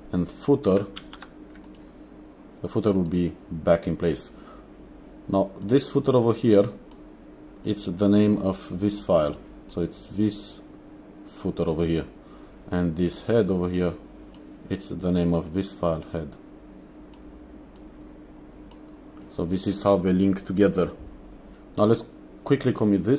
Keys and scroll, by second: 1.1 ctrl+s.